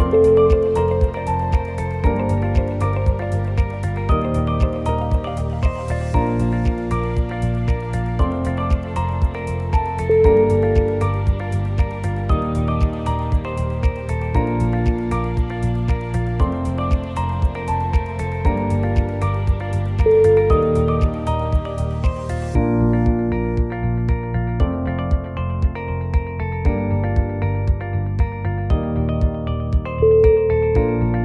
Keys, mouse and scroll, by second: 0.0 scroll up 2, 0.5 Tab, 1.0 scroll up 1, 1.2-1.8 scroll down 4, 1.8 middle click.